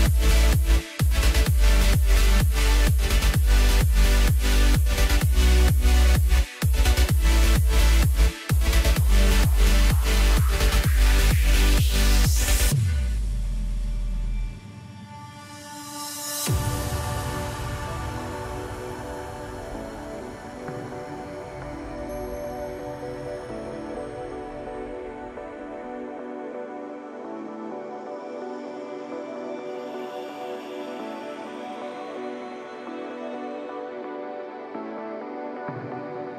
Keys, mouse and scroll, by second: 2.3 click, 5.8-6.4 scroll down 2, 6.4-7.3 scroll down 1, 7.3-10.4 drag, 10.7-13.3 scroll down 4, 13.3-13.7 scroll down 7, 14.1 scroll down 4, 15.7 click, 17.8 click, 18.6 click, 19.0-21.3 middle drag, 21.3 shift+click, 22.7 click, 24.0-25.4 middle drag, 25.4 shift+click, 26.0 shift+click, 26.5-27.7 middle drag, 27.7 shift+drag, 28.3 shift+click, 29.7 KP_1, 31.4 shift+drag, 32.9-33.9 middle drag, 33.9 shift+click, 35.0 ctrl+l.